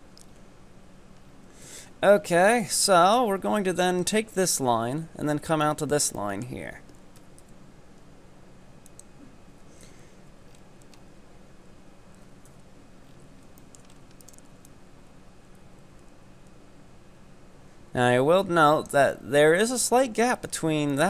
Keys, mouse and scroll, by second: 0.2-0.5 scroll up 6, 1.2 scroll down 4, 1.7 KP_7, 2.2 scroll down 6, 2.6-5.6 shift+middle drag, 6.2-7.2 shift+middle drag, 7.2 e, 9.9 KP_1, 10.5-11.2 scroll up 8, 12.5 KP_7, 13.2 scroll down 5, 13.6 shift+middle click, 14.0 scroll up 3, 14.2 right click, 14.7-17.7 drag, 20.4 right click, 20.9-21.0 drag.